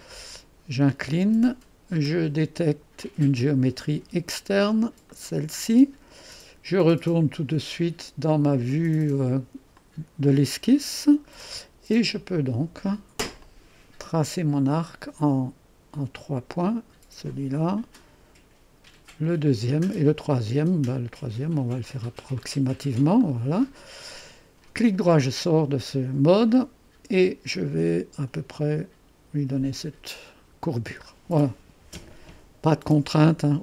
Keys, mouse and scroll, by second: 0.2-3.8 drag, 5.1-8.3 drag, 9.8-15.3 drag, 16.9-19.9 drag, 22.1 click, 26.5-30.1 drag, 31.3-33.6 scroll down 1.